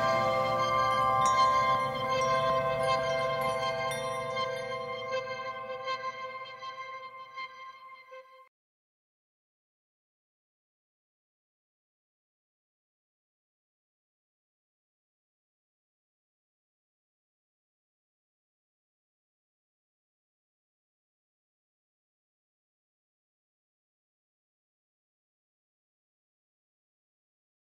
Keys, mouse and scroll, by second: 0.6 click, 2.7 right click, 6.5 click, 7.5 right click, 8.3 click, 9.1 scroll down 1, 10.3 right click, 18.4 scroll up 1, 18.8 right click, 25.7 right click.